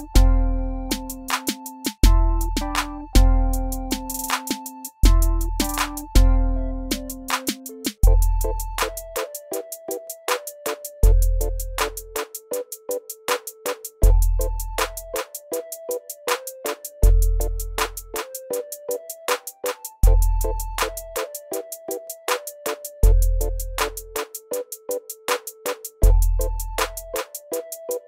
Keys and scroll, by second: 16.5-17.2 typing, 21.0-21.7 typing.